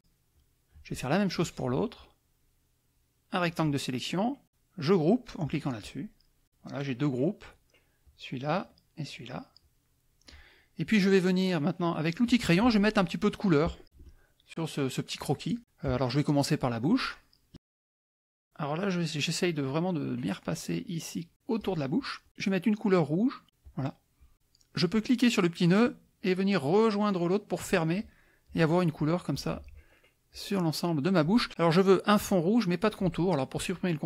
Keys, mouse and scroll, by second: 0.3 click, 1.4-3.7 drag, 5.4 click, 6.4 click, 8.0 click, 9.1 click, 12.2 click, 13.8 KP_Add, 14.5 middle click, 15.1 middle click, 15.5 middle click, 15.8 KP_Add, 16.5 middle click, 18.4-21.8 drag, 23.6 click, 25.8-28.2 drag, 29.3 click, 30.3 click.